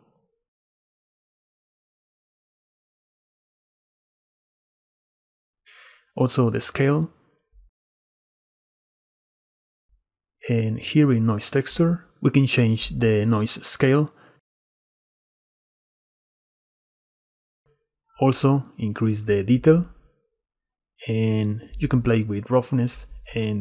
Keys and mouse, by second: 5.3-7.8 shift+drag, 7.8-9.2 shift+middle drag, 10.2 click, 10.9 click, 11.9 click, 13.0-16.5 shift+middle drag, 19.8-21.9 drag.